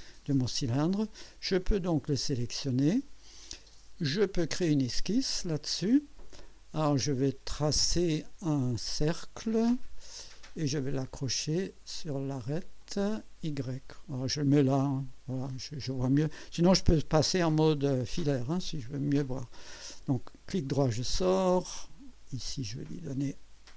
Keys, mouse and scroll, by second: 1.7 click, 4.2 click, 5.1 scroll up 2, 6.0-6.8 right drag, 7.6 scroll down 1, 8.8 right click, 12.8 click, 14.5 click, 15.3 click, 20.3 right click, 22.1 click.